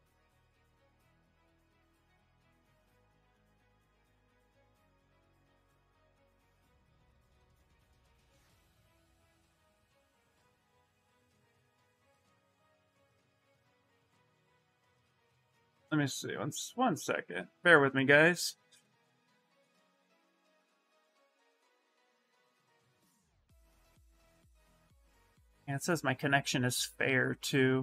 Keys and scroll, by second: 9.4 ctrl+c, 9.6 ctrl+c, 9.9 ctrl+c.